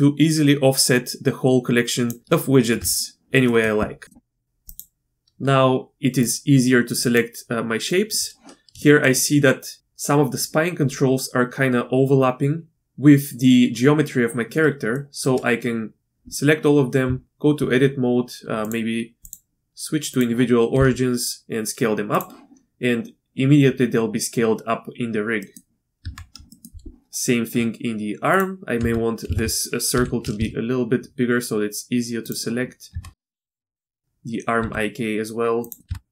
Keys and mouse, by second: 0.3-2.1 drag, 2.3-2.6 shift+middle drag, 3.4 middle click, 4.0 shift+middle click, 4.6 click, 6.2 shift+click, 7.0 shift+click, 7.9 shift+middle click, 8.8 shift+middle drag, 14.9 shift+middle drag, 17.0 Tab, 18.6 click, 19.2-20.2 drag, 20.8 s, 25.4 middle click, 26.0 Tab, 26.5 shift+middle click, 28.3 click, 28.8 Tab, 29.3 alt+a, 29.9 l, 30.3 s, 32.9 Tab, 33.4 click, 33.6 Tab, 33.7 click, 34.0 Tab, 34.6 s, 35.9 Tab.